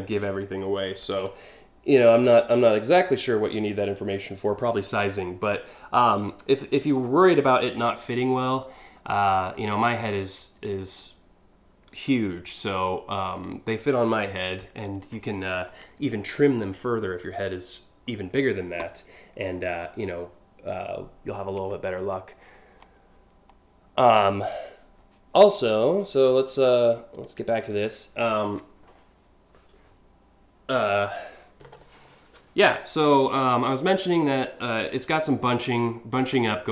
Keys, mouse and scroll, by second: 26.8 click.